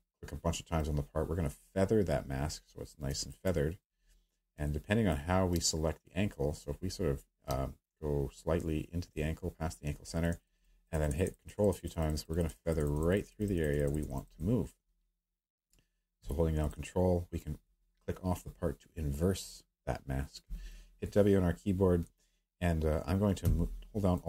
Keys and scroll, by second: 7.5 space, 8.0 space, 9.1 space, 20.4 w.